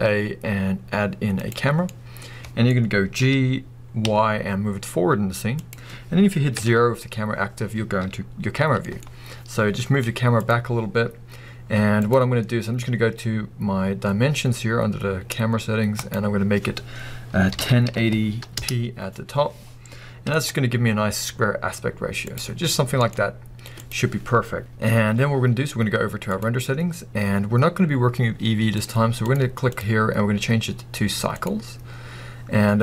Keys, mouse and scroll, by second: 3.1 g, 5.7 click, 6.5 KP_0, 8.5 g, 10.5 click, 11.9 click, 15.9-22.4 drag, 18.6 Return, 20.3 g, 22.9 g, 23.8 click, 24.6 scroll down 1, 26.3 click, 28.7 click, 29.2 click, 29.8-32.8 drag.